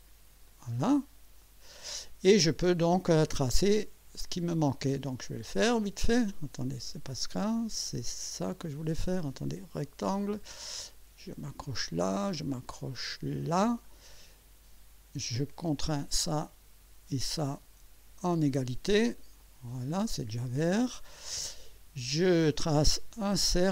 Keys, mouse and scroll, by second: 0.5 click, 1.4 click, 3.8 click, 5.4 click, 6.8 Escape, 10.1 click, 11.7 click, 13.3 click, 13.9 right click, 15.5 click, 17.2 click, 19.4 click, 22.2 click.